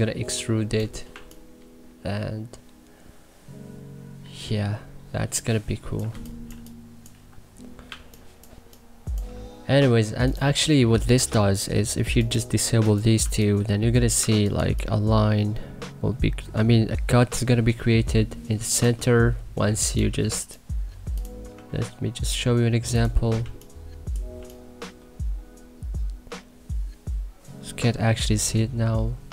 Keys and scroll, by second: 1.1 3, 5.9 1, 6.4 3, 13.1 3, 14.1 1, 14.5 3, 23.4 3.